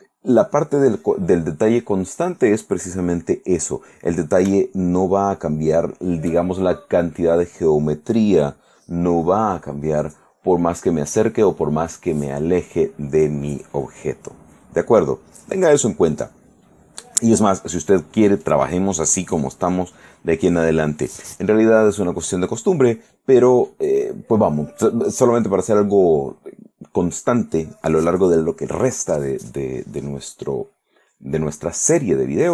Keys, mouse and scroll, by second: 2.9-4.0 drag, 4.8 shift+middle click, 5.9 shift+middle click.